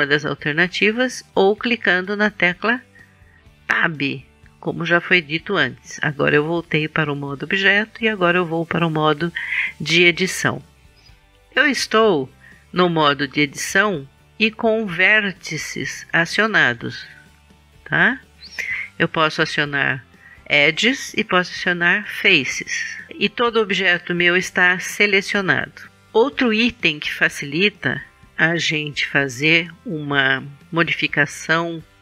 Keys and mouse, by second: 3.8 Tab, 7.9 Tab.